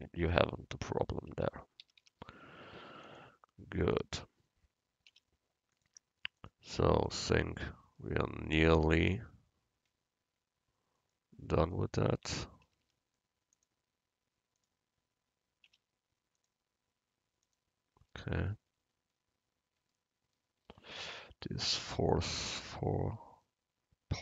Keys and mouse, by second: 0.1 click, 1.4 Tab, 1.9 a, 2.1 a, 5.2 u, 7.5 Tab, 11.1-12.2 right drag, 12.2 Tab, 12.7 a, 12.9 a, 15.8 u, 22.3 Tab.